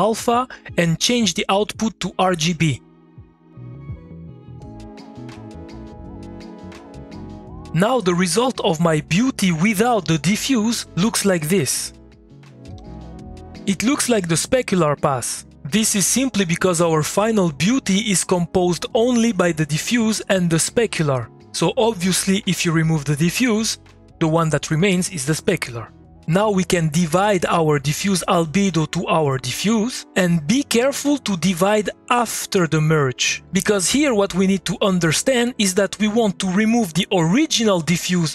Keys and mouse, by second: 0.2-5.6 drag, 5.8-7.3 drag, 12.2 click, 12.7 2.